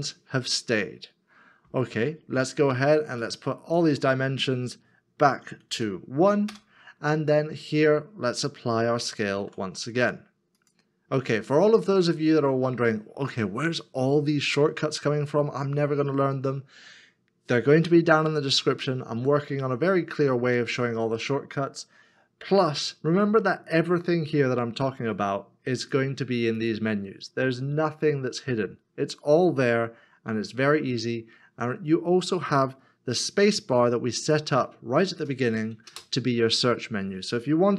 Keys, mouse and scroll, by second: 6.5 Return, 9.0 Return, 9.4 ctrl+a, 35.9 space.